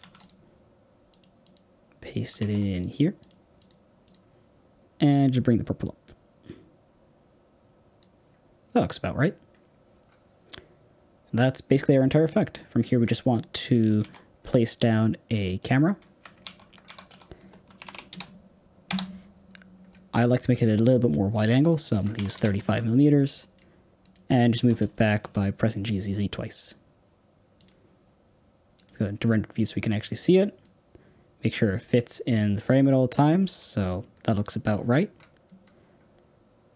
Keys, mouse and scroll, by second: 1.1 click, 5.5-11.9 drag, 11.9 middle click, 12.7 click, 13.1 scroll down 1, 13.3 middle click, 13.6-15.6 scroll down 5, 15.6 shift+a, 16.3 alt+r, 18.8 KP_0, 22.3 click, 24.3 click, 24.5 g, 28.7 click, 30.5-33.6 drag, 34.2 click, 35.4-36.7 middle drag.